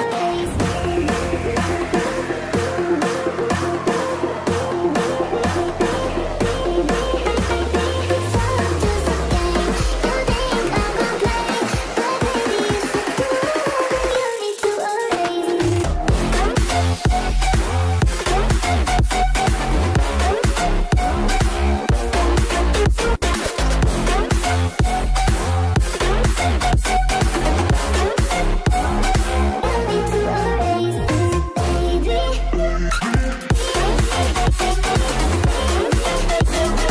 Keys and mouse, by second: 1.0 space, 14.5-23.2 middle drag, 16.5 Left, 16.8 Left, 17.0 Right, 17.1 Right, 22.5 ctrl+z, 22.7 ctrl+z, 22.8 ctrl+z, 22.8 ctrl+z, 23.0 ctrl+z, 23.1 ctrl+z, 25.0 i, 25.6 space, 28.3 space, 35.9-36.9 drag, 35.9-36.9 middle drag, 35.9-36.9 right drag, 36.2 space.